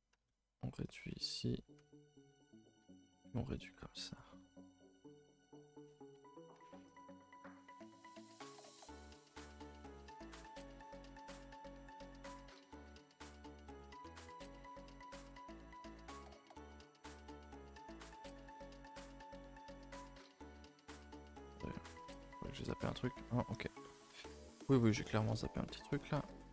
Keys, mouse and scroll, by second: 1.8 e, 3.7 g, 5.3 click, 6.9 alt+click, 7.8 r, 9.3 g, 10.9 alt+click, 12.0 r, 13.4 g, 14.8 1, 15.0 click, 15.1 g, 16.4 click, 16.5 g, 17.1 click, 17.2 g, 18.3 click, 18.3 g, 19.1 click, 19.6 click, 19.8 g, 20.7 middle click, 21.0-22.6 scroll up 17, 21.4 shift+middle click, 22.1 shift+middle click, 22.6 middle click, 23.3-24.3 middle drag, 24.3-24.9 scroll up 4, 24.9 click, 25.0 shift+middle click, 25.7 g.